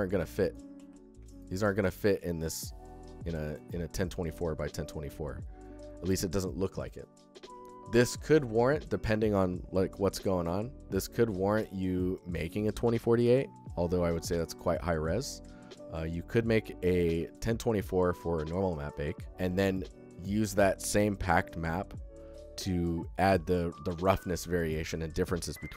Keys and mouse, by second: 1.0 ctrl+f, 1.1 click, 3.4 click, 7.8 click, 8.6 click, 10.1-10.6 alt+shift+drag, 17.1 alt+shift+drag, 18.7 alt+shift+click.